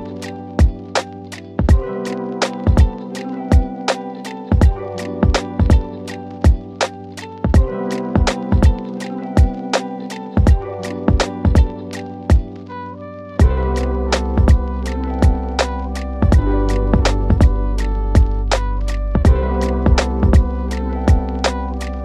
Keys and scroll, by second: 18.3 F3, 19.4 shift+F2, 19.8 Escape.